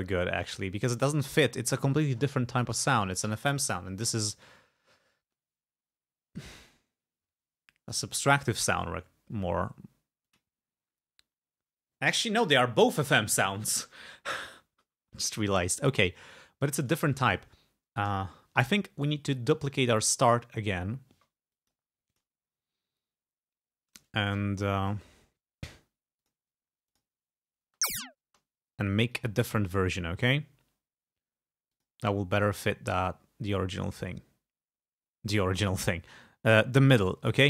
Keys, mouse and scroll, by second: 10.3 click, 16.8 click, 19.0 right click, 20.3 click, 21.6 click, 22.1 click, 23.6 scroll down 2, 25.2-25.6 scroll up 2, 26.3 click, 27.0 click, 27.8 space, 29.2 click, 31.8 click, 35.7 click.